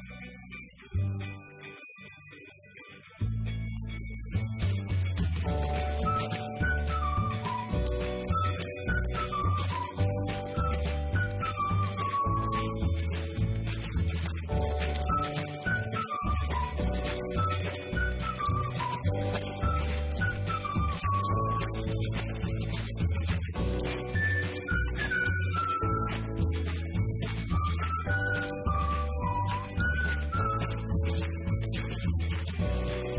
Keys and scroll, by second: 8.0-9.4 typing, 12.7 BackSpace, 13.7 BackSpace, 14.7-20.3 typing.